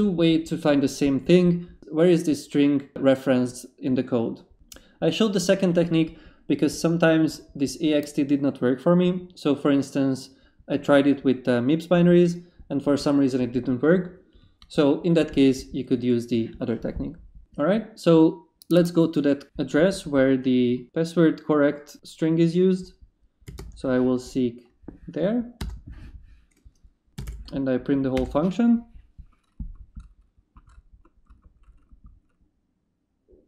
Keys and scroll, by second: 23.4 s, 23.6 space, 25.6 Return, 26.9-27.7 typing, 28.1 Return.